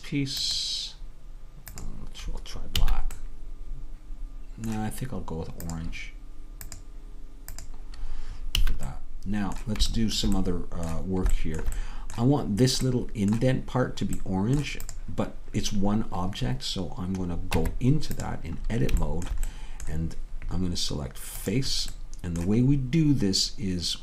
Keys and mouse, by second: 2.9 a, 6.4-8.6 drag, 8.6 a, 10.3-11.6 middle drag, 12.2-16.3 middle drag, 16.3-17.7 drag, 17.7 Tab, 18.7-20.9 middle drag, 21.6-24.0 drag.